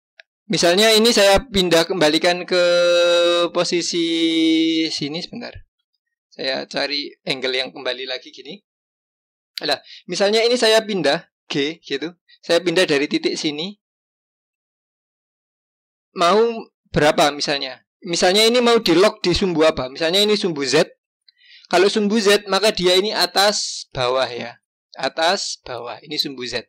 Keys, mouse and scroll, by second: 5.8 g, 11.6 g.